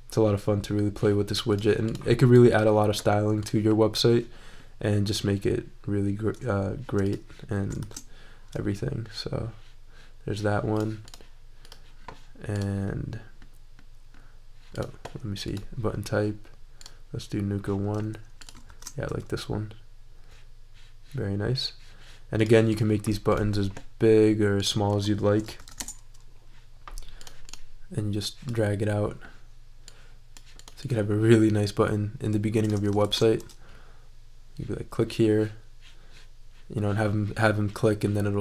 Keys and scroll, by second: 7.8 shift+super+e, 18.7 shift+super+e, 25.3-26.2 typing, 33.0 shift+super+e.